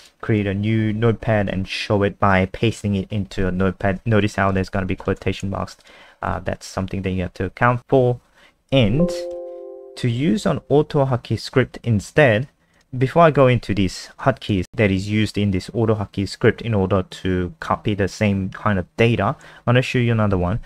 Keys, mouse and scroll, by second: 0.0 click, 1.0 ctrl+v, 1.7-4.6 ctrl+scroll down 3, 4.6 shift+Left, 5.0 Home, 5.3 shift+Right, 5.8 click, 6.0 alt+F4, 6.4 n, 8.8 alt+F4, 9.3 n, 12.7 click, 20.1 ctrl+Page_Down.